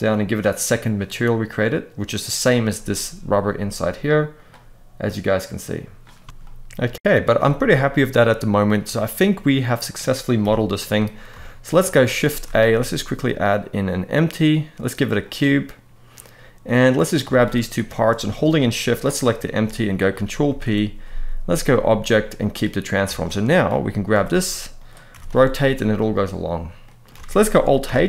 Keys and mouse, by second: 1.3-1.8 middle drag, 6.0 alt+a, 6.2-6.5 middle drag, 6.2 Tab, 7.0-8.2 middle drag, 8.6-9.5 middle drag, 10.1 KP_1, 11.1 shift+middle drag, 11.9 shift+a, 16.3-16.7 middle drag, 17.4 shift+click, 18.5 shift+click, 20.1 ctrl+p, 22.8 alt+a, 23.2 click, 23.8 g, 24.4-24.8 right drag, 24.8 r, 25.0 r, 26.5 middle drag, 26.9 alt+a, 27.5 alt+h.